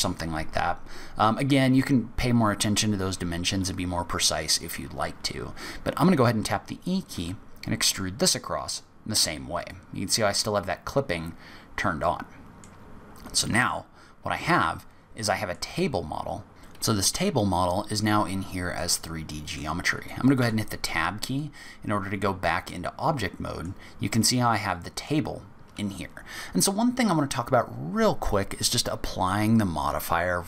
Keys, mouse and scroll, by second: 1.1-2.0 scroll down 3, 7.1 e, 11.4-12.6 scroll down 4, 11.9 middle click, 13.1-13.5 scroll up 2, 13.7-14.1 scroll down 2, 14.1-14.5 scroll up 2, 14.5 middle click, 16.0-16.4 scroll down 2, 16.5-17.0 scroll up 2, 18.1-18.5 scroll down 2, 18.7 middle click, 20.3 Tab, 21.3 middle click, 24.1 middle click.